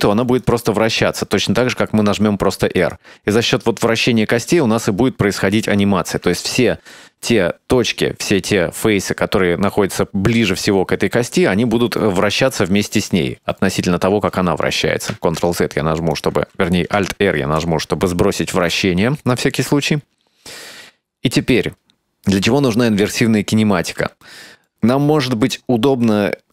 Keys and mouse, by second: 1.0 r, 6.7 shift+middle drag, 15.5 ctrl+z, 16.2 right click, 17.5 alt+r, 18.8-21.7 middle drag, 22.0 shift+middle click, 24.4 shift+middle click.